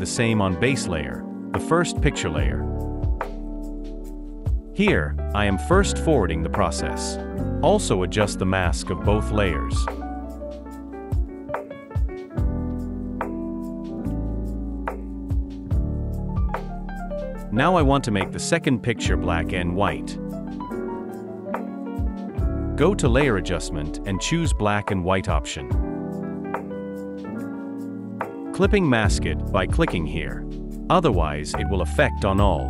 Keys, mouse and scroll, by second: 11.8-12.4 typing.